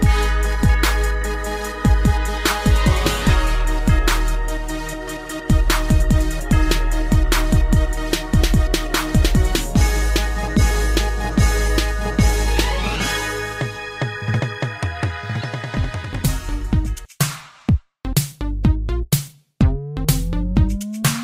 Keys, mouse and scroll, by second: 0.8 scroll down 3, 2.0 b, 2.3 click, 4.2 click, 13.5-14.0 typing, 14.3 click, 16.7 g, 17.5 click, 17.7 click, 18.3 shift+space, 19.3 Escape, 20.2 click, 21.1 shift+space.